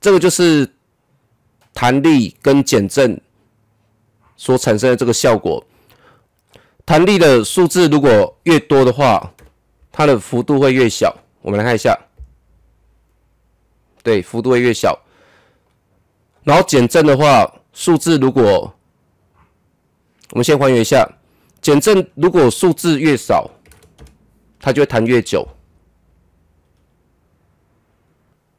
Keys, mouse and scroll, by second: 6.2-8.0 drag, 9.0 KP_5, 9.4 Return, 11.6 KP_0, 15.6-18.8 drag, 20.4 ctrl+Num_Lock, 20.4 click, 20.6 z, 22.6 click, 23.7 KP_1, 23.9 Return, 24.9 KP_0.